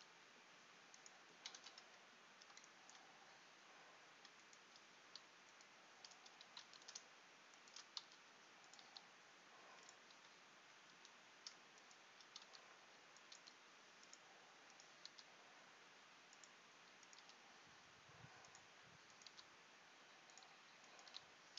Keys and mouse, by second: 1.7 g, 6.8 ctrl+z, 8.1 r, 9.0 g, 10.3 r, 12.6 r, 13.5 g, 15.2 r, 17.3 g, 19.4 r, 21.2 g.